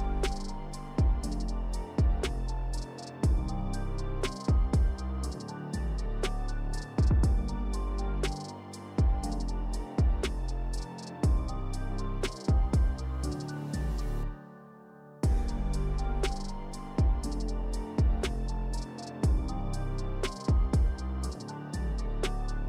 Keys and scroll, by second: 1.4 s, 2.8 s, 3.9 s, 7.2 s, 9.5 5, 12.3 s, 14.2 s, 15.8 2, 20.3 s.